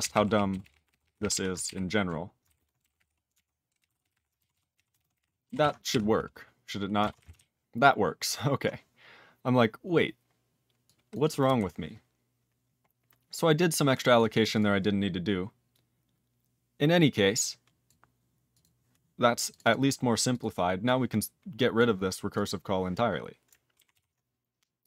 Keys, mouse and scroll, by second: 0.0 ctrl+k, 0.1 ctrl+k, 0.2 ctrl+p, 0.5 ctrl+k, 0.6 ctrl+k, 0.7 ctrl+p, 0.9 ctrl+k, 1.0 ctrl+p, 1.2 ctrl+p, 1.3 ctrl+e, 1.6 alt+b, 2.4 ctrl+b, 2.5-4.6 typing, 4.7 ctrl+e, 4.9 ctrl+space, 4.9 ctrl+a, 5.1 ctrl+g, 5.2 ctrl+e, 5.6 ctrl+s, 11.4 q, 12.0 q, 12.8-13.7 scroll down 1, 13.7 click, 14.1 click, 14.5 click, 14.5 click, 14.8 scroll down 2, 17.4 click, 17.8 click, 18.5 click, 18.6 click, 19.5 click, 19.5 click, 19.6 double click, 19.7 double click, 20.3 click, 20.4 click, 20.8 click, 21.7 click, 22.3 click, 22.3 click, 22.9 click, 23.9 ctrl+s.